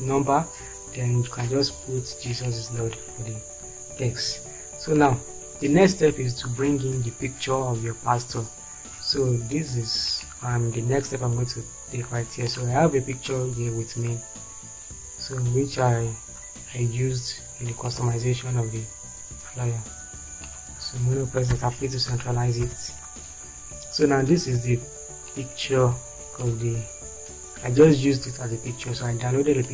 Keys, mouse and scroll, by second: 3.8 Down, 11.4 Down, 21.8 p, 22.9 shift+F4.